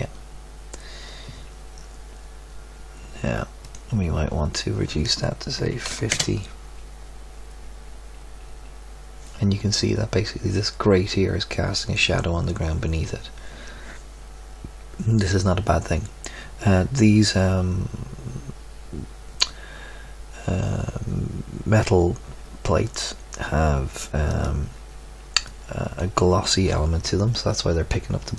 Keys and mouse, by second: 3.8-5.7 drag, 24.3 click, 25.4-28.3 drag, 25.4-25.9 right drag.